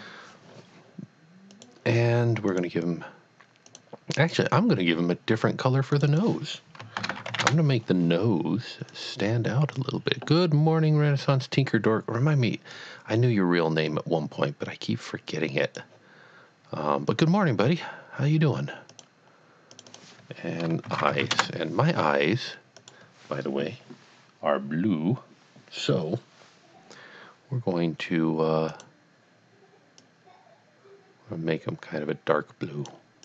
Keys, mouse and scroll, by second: 1.5 click, 2.5 click, 3.7 click, 4.2 click, 5.9 click, 6.2 double click, 7.3 typing, 7.5 Return, 9.0 click, 12.7 click, 17.1 click, 19.4 click, 19.7 click, 20.0 double click, 20.9 shift+e, 21.3 Return, 22.8 click, 28.7 click, 30.1 click.